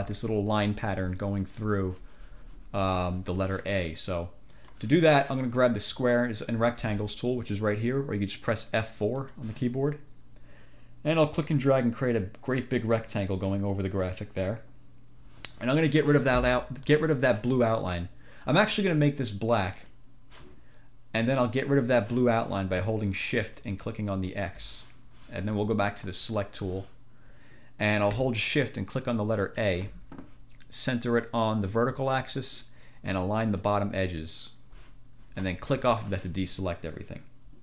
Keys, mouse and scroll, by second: 4.7 click, 9.2 click, 11.5-14.8 drag, 19.9 click, 24.4 click, 26.0 click, 29.5 shift+click, 31.7 click, 33.6 click, 35.8 click.